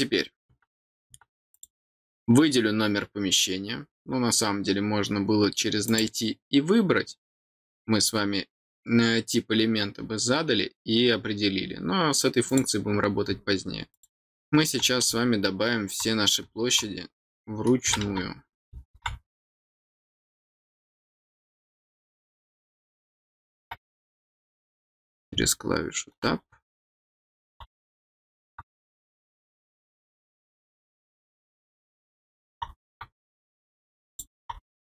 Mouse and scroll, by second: 1.5 click, 5.8 click, 12.4 click, 13.9 click, 20.1 click, 21.1 click, 22.6 click, 23.9 click, 31.1 click, 34.0 click.